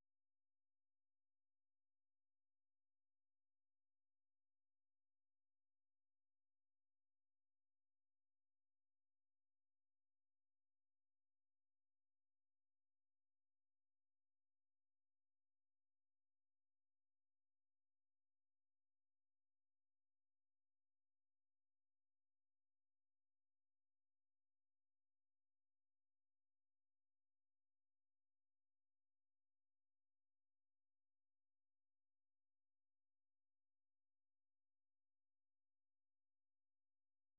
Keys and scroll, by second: 0.0-0.7 typing, 3.7-5.9 typing, 8.1-16.5 typing, 21.5-23.6 typing, 23.9 Return, 25.2-26.8 typing, 28.0-31.2 typing, 33.6-35.6 typing.